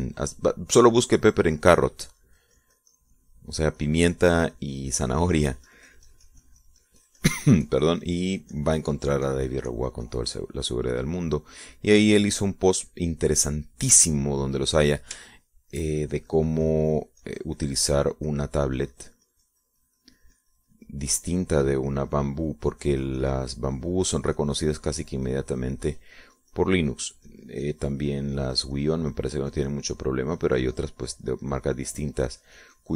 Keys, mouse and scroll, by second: 3.0 click, 3.8-12.1 drag, 15.8 middle click, 17.1 shift+middle click, 18.0-32.0 shift+drag, 32.2-32.9 shift+drag.